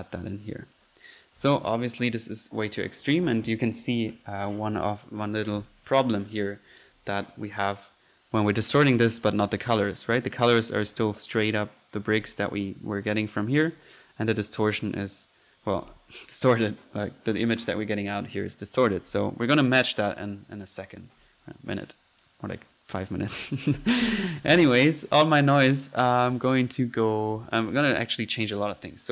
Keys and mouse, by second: 0.4 click, 9.0 click, 9.1-9.5 drag, 10.0-11.9 middle drag, 12.8 click, 13.7 click, 14.7-15.1 drag, 15.5 click, 20.1-21.3 middle drag, 21.4 drag, 22.4 click, 22.6 drag, 23.8 middle click, 24.2 click, 28.6-29.0 drag.